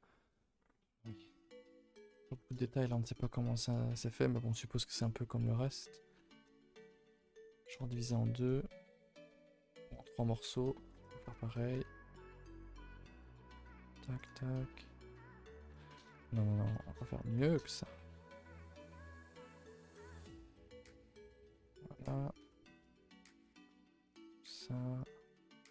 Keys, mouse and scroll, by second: 2.9 scroll up 1, 5.4 middle drag, 6.0 scroll, 6.5 shift+middle click, 6.7 scroll, 7.4 scroll up 1, 7.9 shift+middle click, 8.3 click, 8.6 g, 10.1 a, 10.2 a, 10.7 ctrl+r, 11.7 1, 12.3 click, 12.5 g, 13.5 click, 13.6 g, 14.1 click, 14.2 g, 16.0 click, 16.1 g, 17.1 click, 17.3 g, 18.6 2, 18.7 click, 19.2 e, 21.0 r, 21.9 click, 22.4 e, 23.0 r, 23.6 s.